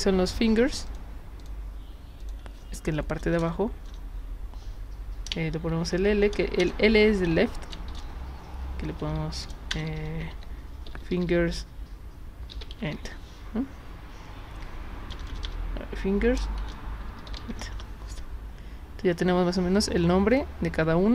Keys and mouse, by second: 0.7 click, 0.9 click, 1.4 click, 2.2 click, 3.2 BackSpace, 3.4 BackSpace, 3.9 BackSpace, 5.7 shift+l, 6.6 BackSpace, 7.2 l, 7.9 shift+-, 9.0-13.2 typing, 15.1-17.9 typing, 19.8 click, 20.3 click.